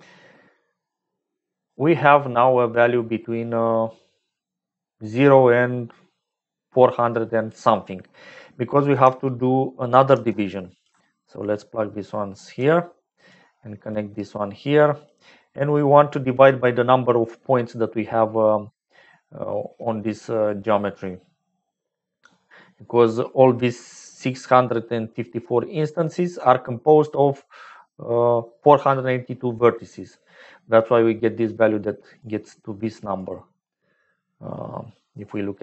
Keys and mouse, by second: 8.8 click, 10.1 shift+d, 11.3-12.5 ctrl+drag, 12.7 click, 13.8-15.2 drag, 16.9 click, 31.4 click, 33.3-35.6 drag.